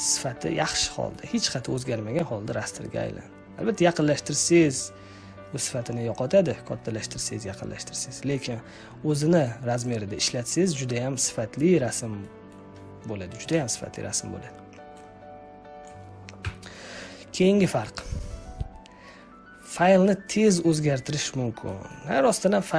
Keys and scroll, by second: 16.3 Delete.